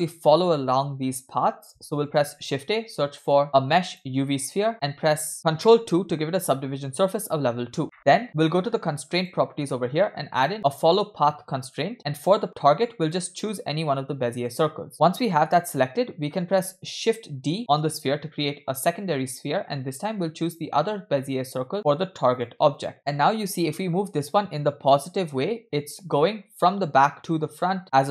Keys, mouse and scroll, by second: 2.3 shift+a, 6.0 ctrl+2, 9.2 click, 10.4-11.8 drag, 13.1 click, 17.3 shift+d, 20.5 click, 21.3-22.5 drag, 22.8-27.9 drag, 28.0-28.1 drag.